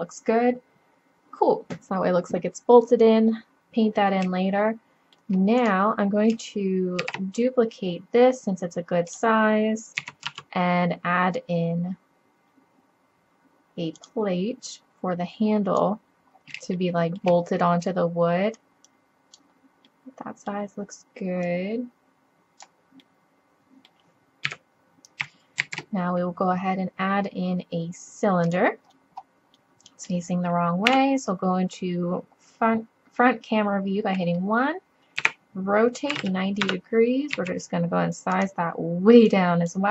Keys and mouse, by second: 7.0 shift+d, 7.5-8.9 middle drag, 10.0 s, 14.7-16.3 drag, 16.6 middle drag, 17.0 middle click, 18.5 middle click, 18.9 click, 19.9-20.3 middle drag, 20.6-21.4 middle drag, 21.5-23.0 middle drag, 23.1 drag, 23.6 middle click, 24.3 middle click, 24.5 KP_7, 24.5 middle click, 25.6 shift+a, 27.0-27.9 middle drag, 30.9 KP_1, 35.2 r, 35.5 click, 37.4 s, 39.3-39.9 drag.